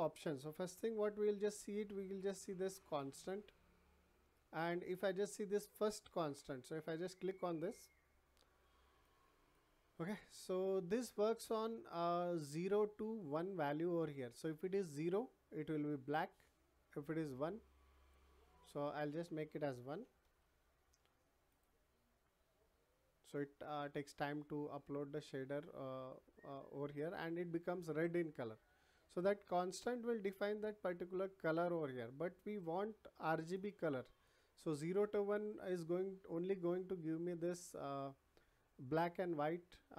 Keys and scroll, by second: 19.8 1, 20.2 Return.